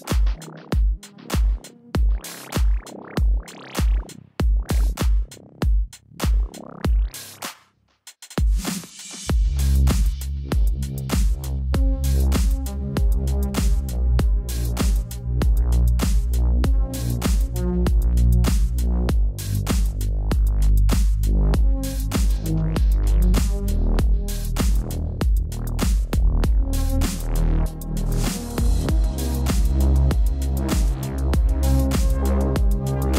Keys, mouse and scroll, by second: 0.9 click, 3.6-4.0 typing, 4.2 click, 7.3 space, 7.4 click, 7.5 space, 8.8-12.9 typing, 8.9 click, 9.5 click, 10.2 click, 11.7 click, 12.8 click, 14.2 space, 14.3 click, 14.4 space, 15.4 space, 15.5 click, 15.6 space, 16.9-17.8 typing, 16.9 click, 17.3 ctrl+-, 17.7 click, 19.8 space, 19.9 click, 19.9 space, 20.4 ctrl+-, 21.8 click, 23.5-24.2 typing, 25.7 scroll up 1, 27.9 click, 32.4 ctrl+alt+shift+e.